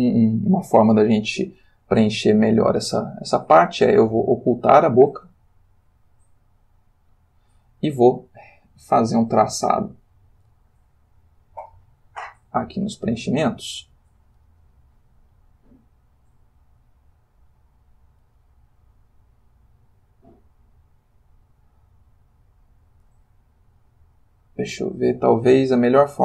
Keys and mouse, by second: 6.5 click, 10.0 click, 12.8 click, 14.1 click, 22.7 click.